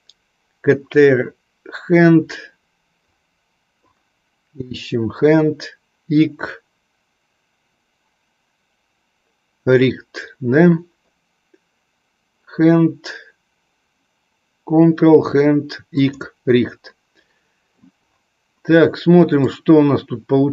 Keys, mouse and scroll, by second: 19.5-20.5 drag.